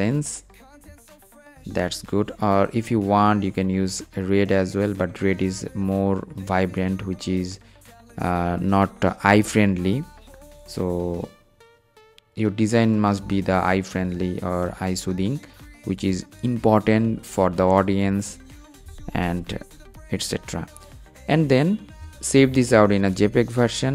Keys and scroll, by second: 22.0 shift+super+s.